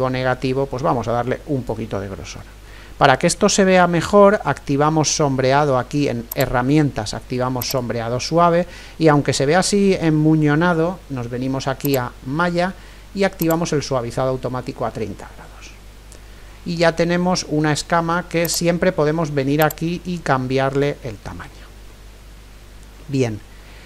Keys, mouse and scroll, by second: 2.4 middle click, 4.8-6.3 middle drag, 6.3-9.5 drag, 11.8-15.4 drag, 16.4-23.8 middle drag, 18.4-23.8 drag.